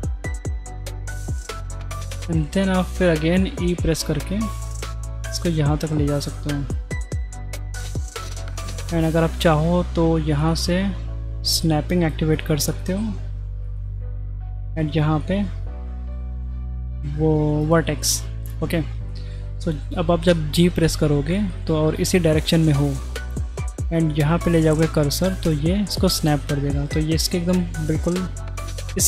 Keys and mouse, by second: 3.4 e, 10.5 click, 13.7-18.2 drag, 20.7 g.